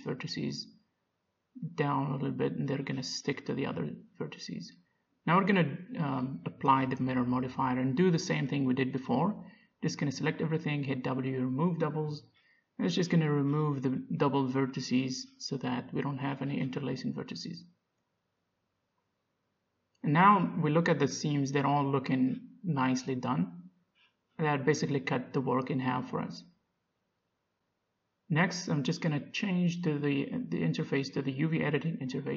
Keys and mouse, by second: 0.1 a, 0.3 b, 1.0 a, 1.3 b, 3.1 g, 4.3 a, 6.7 Tab, 8.5-10.5 drag, 9.3 a, 9.9 Tab, 11.0 a, 11.7 w, 14.8 Tab, 15.4 z, 15.6 middle click, 16.8 z, 17.7 Tab, 18.3 a, 20.3 middle click, 21.6-22.6 middle drag, 23.0-26.7 middle drag, 30.1 middle click, 30.5-32.1 drag.